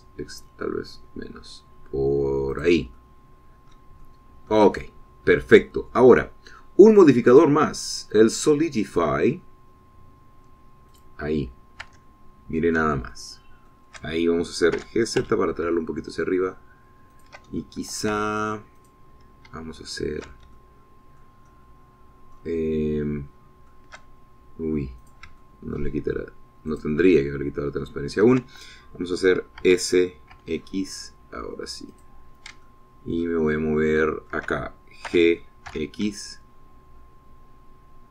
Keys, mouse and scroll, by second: 1.0 scroll up 2, 1.7 scroll up 2, 3.6 click, 4.0 middle click, 5.1 shift+middle click, 8.4 click, 12.0 click, 12.9 Tab, 13.6 middle click, 14.2 shift+middle click, 15.8 g, 16.3 z, 18.2 shift+click, 18.7 shift+click, 19.3 Tab, 19.9 click, 21.0 shift+middle click, 21.6 shift+middle click, 22.5-23.6 shift+middle drag, 23.7-24.9 shift+middle drag, 26.1 shift+click, 26.5 shift+middle click, 27.8 shift+click, 28.2-29.5 shift+middle drag, 30.7 s, 31.4 x, 33.0 click, 33.7 shift+click, 34.5 shift+middle click, 34.5-35.6 shift+drag, 36.2 g, 36.8 x.